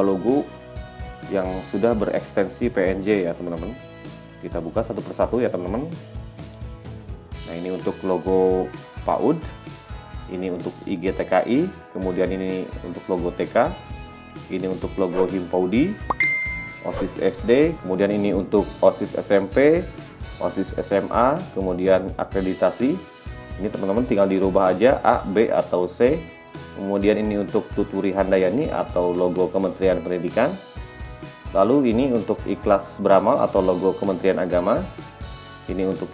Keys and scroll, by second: 27.9 t.